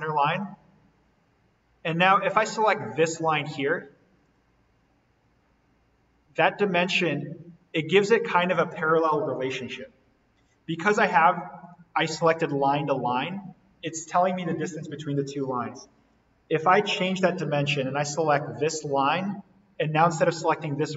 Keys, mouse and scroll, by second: 0.1 click, 4.1 click, 11.6 click, 16.0 Delete, 16.9 d, 18.6 click.